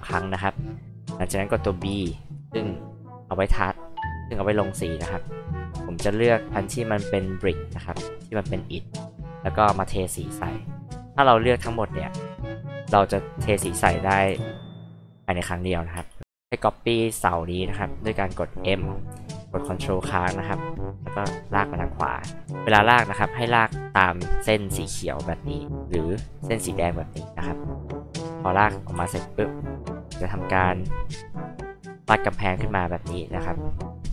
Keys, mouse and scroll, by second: 1.9 b, 5.5 click, 6.8 click, 8.1 click, 9.9 click, 11.0 click, 13.6 space, 13.8 click, 14.3 h, 14.5 click, 16.0 space, 20.3 ctrl+click, 25.9 ctrl+click, 27.6 ctrl+click, 28.9 r, 29.6 click, 31.2 click, 32.0 p, 32.4-34.0 drag.